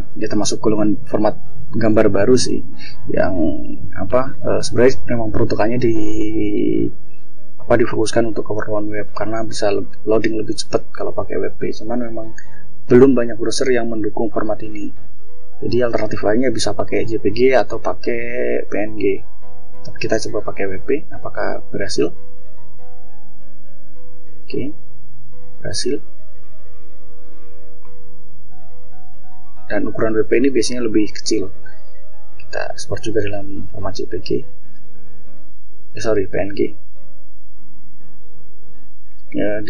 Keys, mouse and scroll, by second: 15.3 click, 20.2 click, 24.1-24.6 scroll down 2, 26.9 scroll up 2, 27.3 scroll down 2, 31.0-31.3 scroll up 2, 32.0 click, 33.3 click, 34.5 click, 37.0 scroll down 2, 38.0 click.